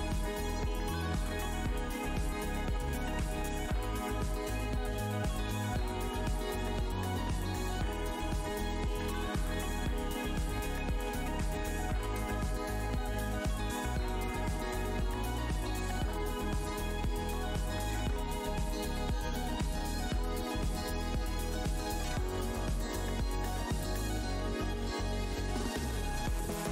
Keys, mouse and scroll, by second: 0.8 right click, 1.3 alt+click, 1.4 alt+Tab, 3.3 alt+click, 3.9 Tab, 3.9 right click, 4.0 Tab, 4.6 alt+Tab, 5.4 Tab, 5.8 click, 5.8 Tab, 6.5 ctrl+shift+Tab, 8.8 scroll down 1, 9.5 scroll up 1, 10.7 ctrl+Tab, 11.6 right click, 11.7 w, 12.1 alt+scroll down 1, 13.1 Tab, 13.8 alt+click, 14.3 click, 14.6 Tab, 14.9 scroll down 1, 16.0 click, 17.1 Tab, 17.8 ctrl+s, 26.3 Tab, 26.3-26.7 scroll up 1.